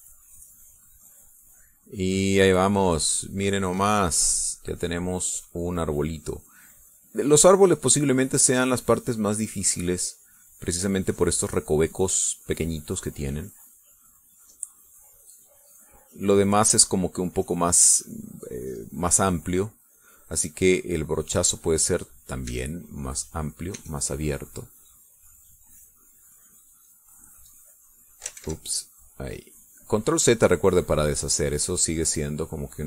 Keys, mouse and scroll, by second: 0.3-2.6 drag, 3.7-6.8 drag, 7.3 click, 8.5-10.5 drag, 10.7-11.0 scroll down 1, 11.0-14.5 drag, 14.9-16.2 drag, 16.3 middle click, 17.9-20.0 drag, 21.6 click, 22.8 click, 23.4 e, 23.7 click, 24.7 e, 25.7 click, 26.1-27.4 drag, 28.6 click, 29.3 ctrl+z, 29.6 ctrl+click, 30.6 click, 31.8 click.